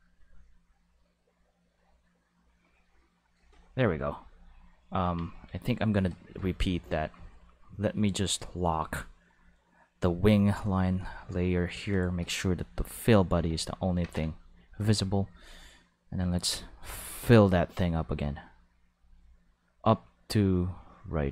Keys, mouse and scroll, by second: 5.0 Tab, 5.3 a, 8.8 click, 9.9 click, 13.4 x, 13.5 click, 14.0 ctrl+Tab, 14.6 click, 15.9-21.3 drag.